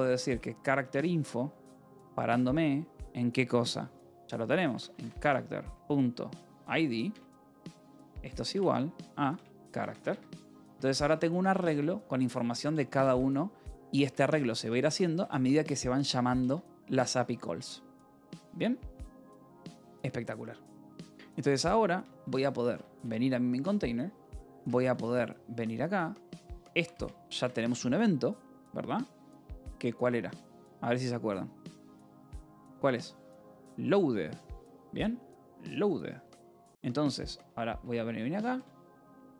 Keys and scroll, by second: 0.0-1.5 typing, 4.4-11.0 typing, 12.1 shift+v, 12.4 Escape, 12.9 k, 14.2 k, 15.7 shift+v, 16.3 Escape, 16.9 k, 18.7 j, 19.5 k, 20.1 j, 21.9 :, 22.4 k, 22.9 Return, 23.7-25.1 typing, 26.6 a, 26.8 space, 27.8 (, 30.3 Escape, 30.4 h, 31.8-33.2 typing, 36.1 :, 37.7 ctrl+6, 38.4-39.3 typing.